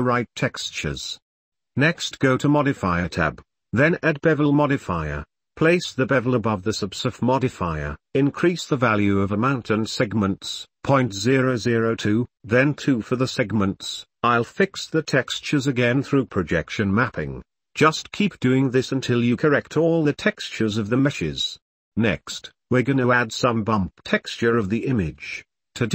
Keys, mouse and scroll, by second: 0.0 shift+click, 0.3 Tab, 0.4 click, 0.7 u, 0.9 g, 0.9 s, 1.2 Tab, 3.6-5.7 drag, 6.4 middle drag, 7.0-8.3 drag, 10.2 middle drag, 11.5 middle click, 12.0-15.2 middle drag, 14.5 KP_0, 16.6 w, 18.5 click, 19.3 click, 19.5 click, 19.6 Tab, 19.9-21.3 typing, 20.1 Tab, 20.6 Tab, 20.8 click, 20.9 Tab, 21.0 Tab, 21.6 Tab, 21.7 click, 23.1 click, 23.8 g, 25.5 click.